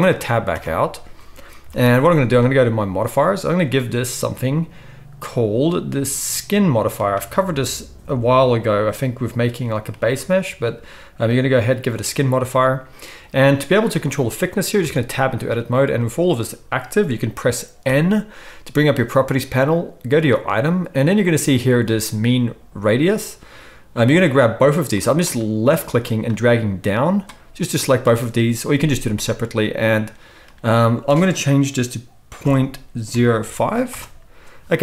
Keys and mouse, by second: 0.5 Tab, 1.6 KP_1, 1.7-2.6 drag, 1.7-2.6 middle drag, 1.7-2.6 right drag, 3.1-4.7 drag, 3.6-4.7 middle drag, 3.6 right click, 14.8 Tab, 17.8 n, 20.4-24.0 drag, 26.0-29.7 drag, 29.7 middle click, 30.0-34.8 drag.